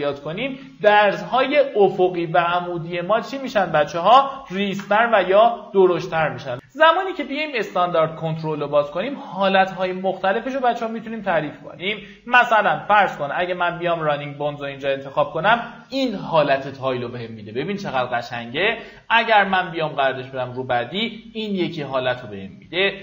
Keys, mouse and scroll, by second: 3.0-4.3 drag, 4.5 KP_1, 6.8 click.